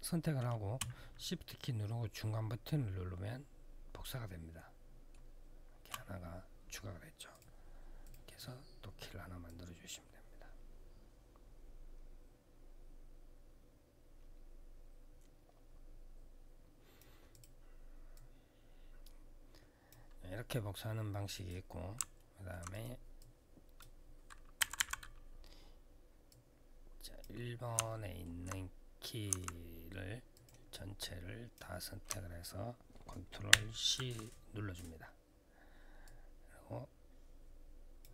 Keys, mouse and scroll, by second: 1.6 shift+middle click, 7.1 click, 7.8 click, 9.2 click, 17.1 click, 17.1 click, 17.9 click, 21.1 click, 21.9 alt+middle click, 22.5 click, 24.3-25.0 typing, 26.0 click, 27.6 alt+middle click, 28.3-28.9 scroll down 3, 29.5 scroll down 1, 30.1 click, 30.5 click, 33.2 ctrl+c, 35.8 click.